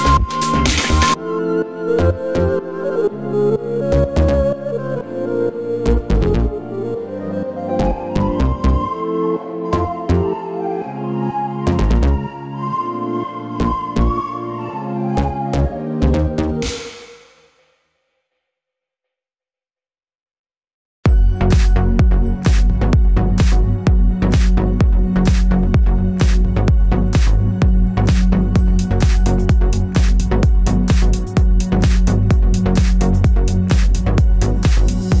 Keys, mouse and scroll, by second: 1.1 click, 1.5 click, 2.1-4.8 middle drag, 4.8 click, 5.4-7.0 middle drag, 6.5 1, 7.0 click, 7.5 x, 8.6 click, 8.8-10.9 middle drag, 9.1 Tab, 9.9 Tab, 10.2 3, 10.5 z, 10.9 click, 11.8-12.2 middle drag, 12.2 shift+d, 12.3 Return, 12.7 Tab, 13.1 click, 13.3 Tab, 14.3 shift+click, 15.0-17.3 typing, 15.3 click, 16.2-16.6 scroll up 1, 16.6 scroll down 1, 17.1 click, 18.0-19.5 drag, 18.4 g, 19.0 g, 19.7-23.2 drag, 20.2 ctrl+r, 20.8 Escape, 22.1 g, 23.4 click, 23.6 g, 24.6 g, 25.1 click, 25.3 ctrl+r, 25.7 Escape, 25.8 click, 26.1 g, 27.1-28.3 drag, 27.5 g, 28.9 g, 29.2 click, 29.6 KP_3, 30.8-32.6 scroll up 2, 32.6 middle click, 33.0-33.6 scroll down 2, 33.6 ctrl+r, 33.6-35.2 middle drag.